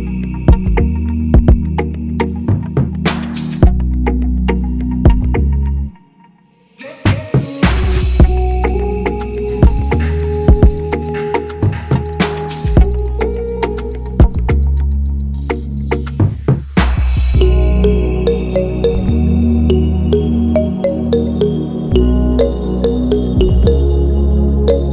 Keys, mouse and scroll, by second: 12.1 click, 12.7 click, 13.0 click, 13.6 click, 14.8 click, 15.5 click, 16.2 click, 17.2 click, 17.9 drag, 19.5 click, 19.9 click, 21.6-22.0 drag.